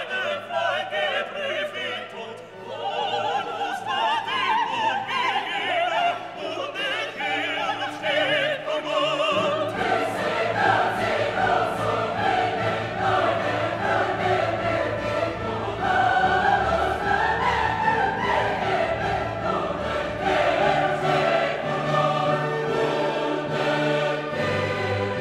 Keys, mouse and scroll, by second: 7.3 scroll up 1, 7.6-8.1 scroll down 1, 9.0 click, 14.2 click, 18.1-18.6 scroll down 1, 19.4 click, 20.0-20.7 scroll down 1, 21.2-24.2 drag.